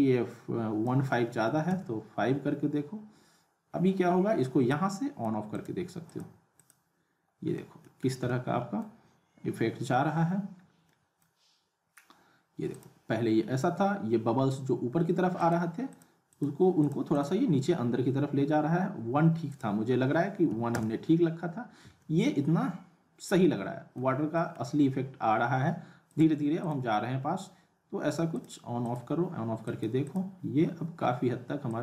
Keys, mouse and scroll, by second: 4.7-5.3 click, 7.5 middle click, 8.0 scroll down 1, 8.2-8.9 alt+middle click, 8.9-9.3 scroll up 1, 10.9-11.5 middle drag, 12.7 click, 15.4 click, 19.3 click, 19.5 click, 22.0-24.2 alt+middle drag, 26.1 click.